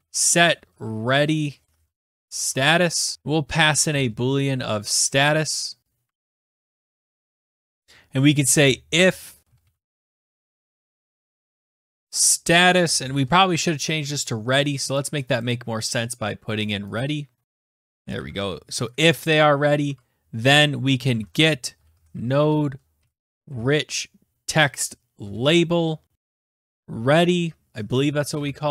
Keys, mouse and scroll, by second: 0.0-13.7 typing, 15.1 click, 15.2 click, 15.5 click, 15.6 click, 17.1 click, 17.3-18.2 typing, 17.4 click, 18.0 click, 18.0 click, 18.4 ctrl+c, 19.0 click, 19.1 click, 19.3 ctrl+v, 19.5 click, 20.1 Tab, 21.0-24.2 typing, 25.4 Down, 25.5 Return, 25.9-28.7 typing.